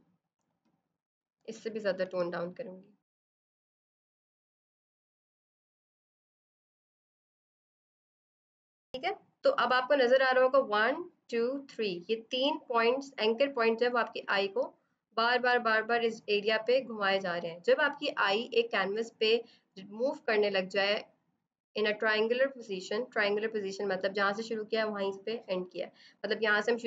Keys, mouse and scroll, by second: 4.0 click, 4.7 l, 4.8 click, 5.2 z, 5.3 click, 5.5 click, 5.7 shift+click, 5.8 click, 7.0 ctrl+0, 7.1 click, 7.9 click, 8.3 i, 8.4 click.